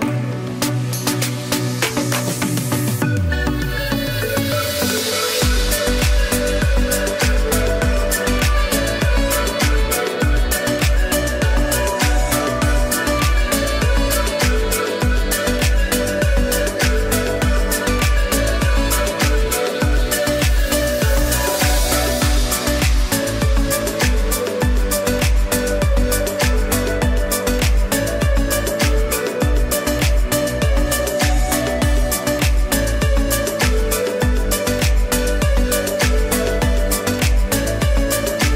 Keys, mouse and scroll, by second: 6.3 click, 6.9 space, 7.0 click, 7.4 space, 9.2 click, 9.9 space, 10.2 click, 10.5 space, 13.3 click, 13.6 space, 13.8 click, 14.2 space, 14.5 click, 14.9 space, 15.1 click, 16.3 ctrl+j, 17.1 ctrl+shift+a, 22.9 click, 23.4 space, 23.6 click, 24.2 g, 25.0 click, 27.3 click, 33.2 click, 36.9 ctrl+z.